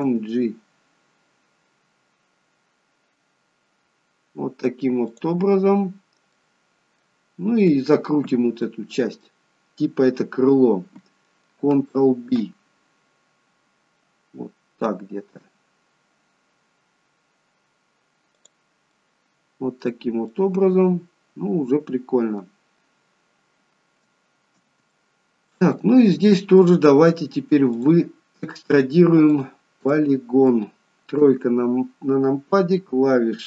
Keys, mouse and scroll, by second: 0.0 g, 6.4 middle click, 8.7 middle click, 12.4 ctrl+b, 18.9 middle click, 20.3 middle click, 22.7-23.4 scroll down 2, 25.0 shift+middle click, 25.8 middle click, 27.8 click, 29.4 click, 30.0 middle click, 31.3 KP_3.